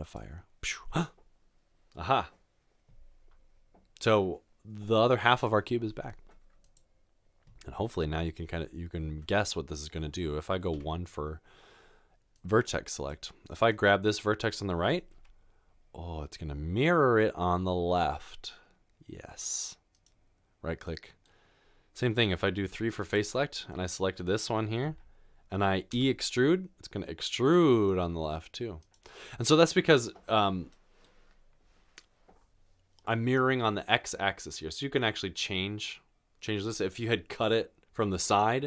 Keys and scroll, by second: 8.5 Tab, 9.1 Tab, 10.7 1, 13.5 typing, 15.2 g, 25.9 typing.